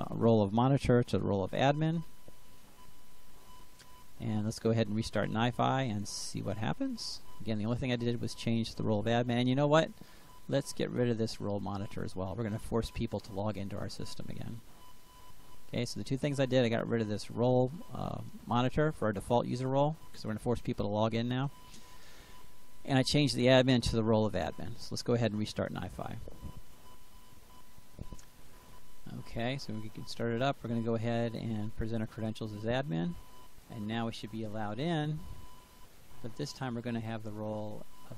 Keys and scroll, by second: 0.9 ctrl+v, 12.4 Delete.